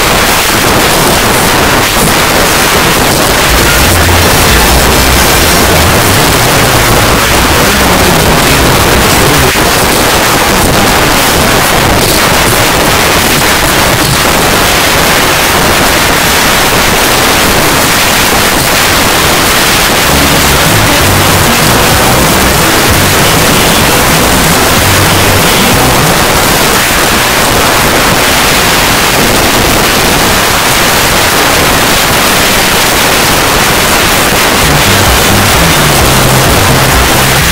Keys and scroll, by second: 9.5 Page_Down, 26.1 Page_Down.